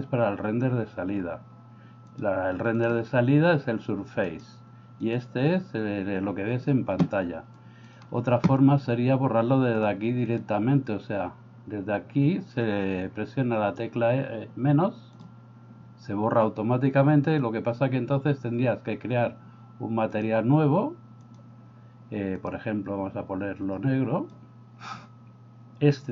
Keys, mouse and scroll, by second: 2.1 click, 2.8 click, 4.3 drag, 5.1 drag, 7.6 click, 15.1 click, 20.1 click, 21.2 click, 22.4 click.